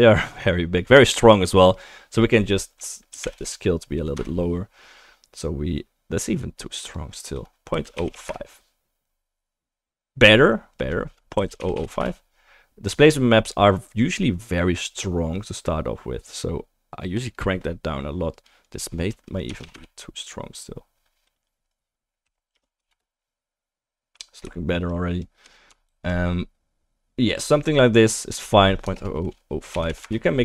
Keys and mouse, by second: 6.4-13.0 middle drag, 11.7-13.0 drag, 11.7-13.0 right drag, 11.7 0, 21.8-25.4 middle drag, 23.3 click, 23.3 right click, 25.9 ctrl+z.